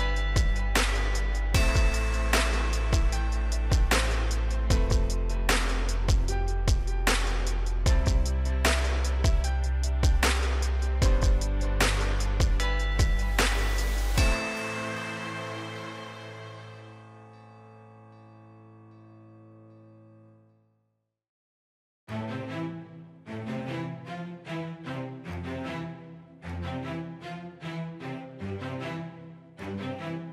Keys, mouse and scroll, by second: 2.4 typing, 3.7 Return, 5.7 click, 8.6-9.5 scroll down 1, 22.6 click, 23.6 right click, 24.6 click, 27.4 shift+click.